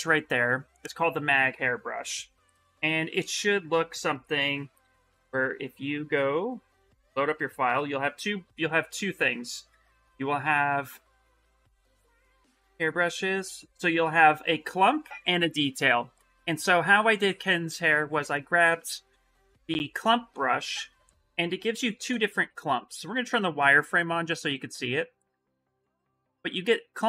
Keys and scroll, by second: 22.7 shift+f.